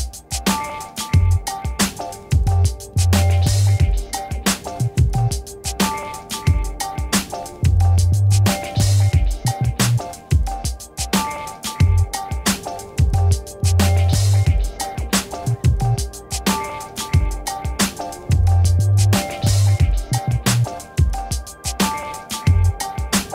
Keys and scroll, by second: 3.7 5.